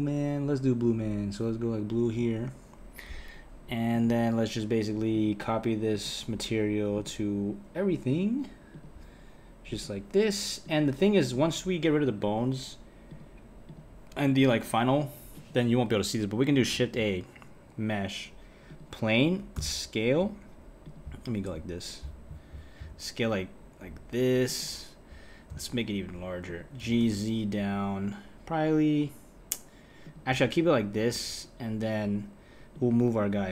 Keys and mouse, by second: 3.9 click, 6.1-7.1 drag, 8.9 click, 11.4 click, 13.8-14.4 drag, 15.3 click, 16.7 shift+a, 19.5 s, 22.8 s, 25.5 s, 26.8 g, 31.1 KP_1, 32.7 click.